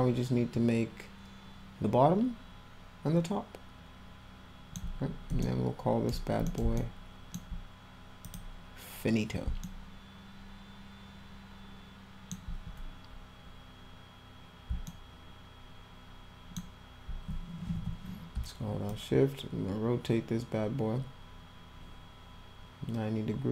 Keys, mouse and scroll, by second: 2.3-2.7 alt+scroll up 2, 5.5 alt+middle click, 6.5 middle click, 6.8 alt+middle click, 8.3 click, 9.7-12.3 alt+middle drag, 14.9-16.6 alt+middle drag, 17.8 e, 18.9-23.5 shift+drag.